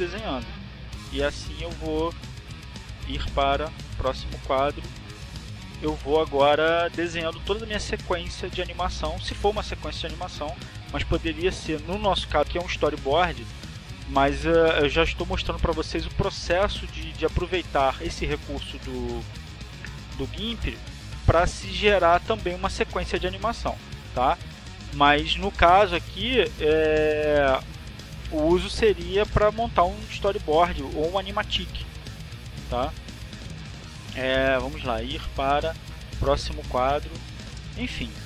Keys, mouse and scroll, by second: 0.3 click, 3.7 click, 4.7 click, 8.2 click, 20.3 click, 25.9-27.5 drag, 29.1 ctrl+z, 30.0 click, 34.6 scroll up 2, 36.2 click, 37.0 click.